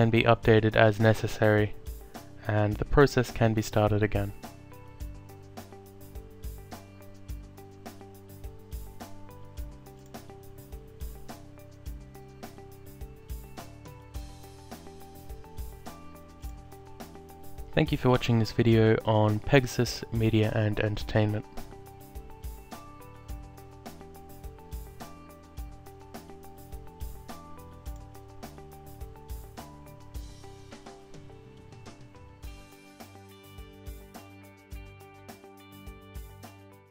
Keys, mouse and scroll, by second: 0.1 alt+click, 1.8 alt+click, 5.5 click, 7.5 alt+click, 10.3 click, 12.0 click, 13.4 alt+click, 16.5 alt+click, 19.2 Tab, 25.4 click, 27.7 alt+click.